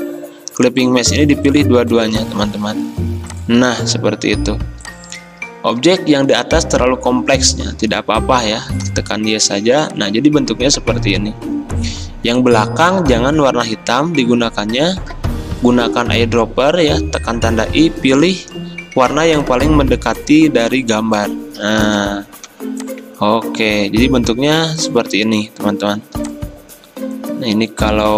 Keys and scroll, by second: 15.7 i, 22.6 v, 26.2 r.